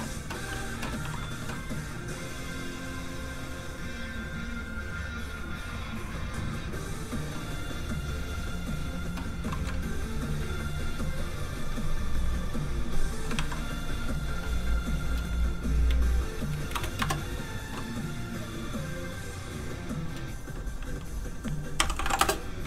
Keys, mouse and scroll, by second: 1.0 ctrl+w, 1.7 right click, 3.7 click, 5.1-5.8 scroll down 1, 5.8 click, 9.7 ctrl+scroll up 1, 12.2 scroll down 1, 13.1 scroll up 1, 13.3 ctrl+w, 14.1 w, 14.2-15.2 scroll up 1, 15.2 click, 16.7 BackSpace, 17.0 Return, 18.8 scroll down 1, 19.7-20.7 scroll up 1, 20.7 click, 21.8-22.6 typing.